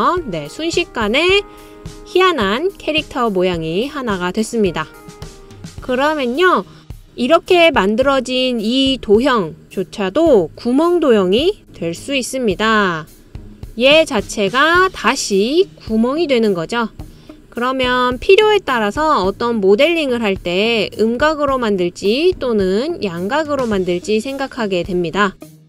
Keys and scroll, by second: 12.5 super+c, 12.9 super+v.